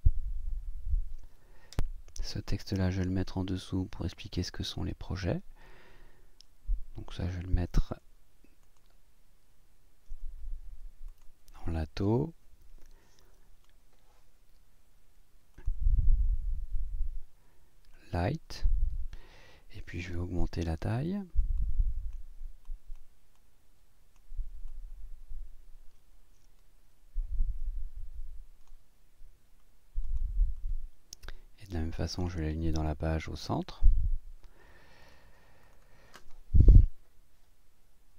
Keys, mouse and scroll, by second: 1.8 click, 2.4-4.8 drag, 8.6 click, 9.7 scroll up 1, 10.2-10.5 scroll up 1, 11.1 click, 15.5 click, 17.9 click, 21.6 click, 22.6 click, 23.3 click, 24.7 click, 30.0 click, 33.7 click, 35.0 click, 35.6 click, 36.9 Up.